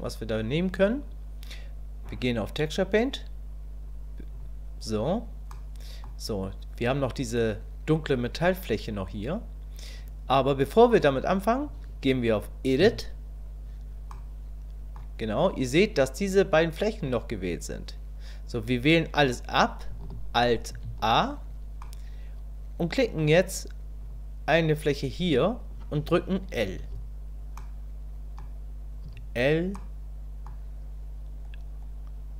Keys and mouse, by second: 0.7 click, 2.0-4.4 drag, 5.5 middle click, 12.8 Tab, 14.1 middle click, 20.7 alt+a, 21.8-23.1 drag, 27.7 click, 29.1 l, 29.8 click.